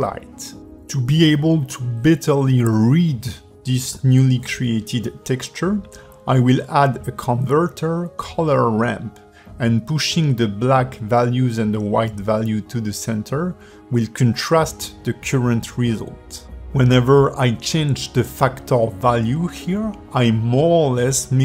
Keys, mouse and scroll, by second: 2.0 click, 3.7 click, 4.0 click, 5.0 g, 5.9 shift+a, 10.7 click, 13.4 click, 16.0 click, 17.8 click.